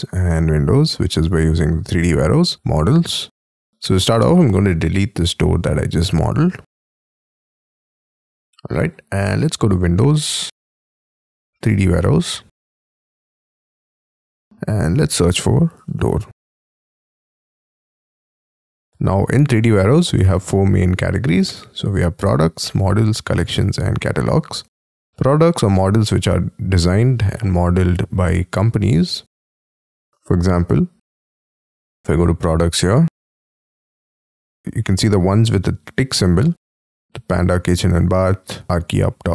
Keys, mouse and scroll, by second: 1.3 scroll down 5, 1.7-2.3 scroll up 12, 4.2 middle click, 7.0 Delete, 8.0 middle click, 15.1-16.6 typing, 29.0-31.2 scroll down 3, 31.2-32.1 scroll up 4, 32.1-34.6 scroll down 7, 34.6-38.5 scroll down 1.